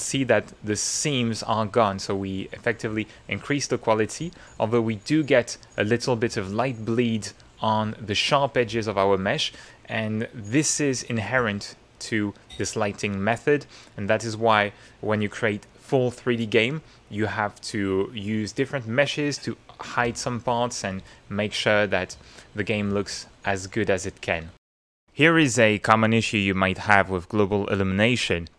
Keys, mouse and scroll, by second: 1.4 middle click, 3.4 click, 4.0 middle click, 10.0 middle click, 13.1 click, 13.7 middle click, 21.6 click, 22.2 ctrl+click, 23.2 shift+middle click, 24.0-25.0 shift+middle drag.